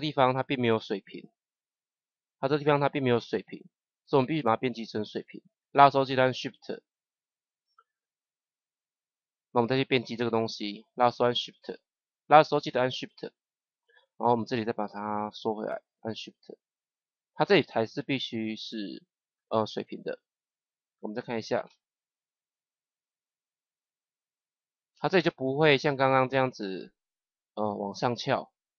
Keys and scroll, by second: 21.6 KP_0.